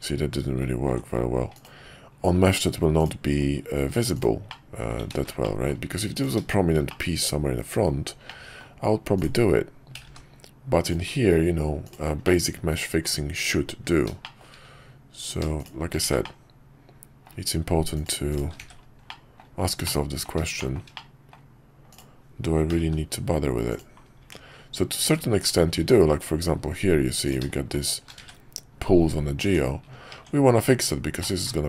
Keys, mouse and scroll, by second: 0.0 ctrl+z, 3.0 click, 4.1 click, 4.5 middle click, 5.2 ctrl+z, 5.4 middle click, 6.1 click, 6.9-7.9 middle drag, 8.2 middle click, 9.1 click, 9.9 g, 11.9 click, 12.2 middle click, 14.2 shift+middle click, 15.2 click, 15.6 shift+click, 16.2-17.2 middle drag, 17.9 click, 18.3 click, 18.6 1, 19.0 middle click, 19.8 middle click, 20.6 middle click, 20.9 middle click, 21.9 click, 22.7 g, 24.2 Tab, 27.2 click, 27.8 shift+click, 28.2 1, 29.4 Tab, 31.2-31.6 middle drag.